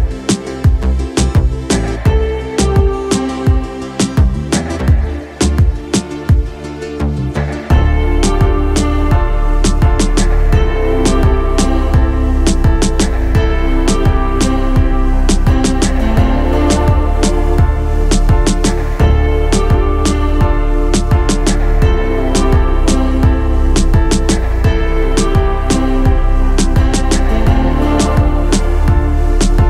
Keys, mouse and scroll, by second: 12.1 middle click, 13.9 middle click.